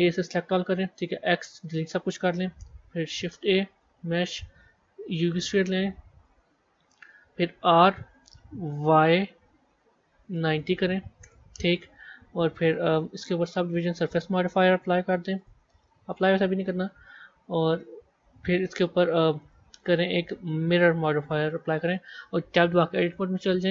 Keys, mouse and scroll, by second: 0.0 a, 1.0 x, 3.0 shift+a, 6.1 KP_1, 6.5 scroll up 4, 7.5 r, 12.7 click, 13.5-17.7 drag, 19.3-22.4 drag, 22.5 b.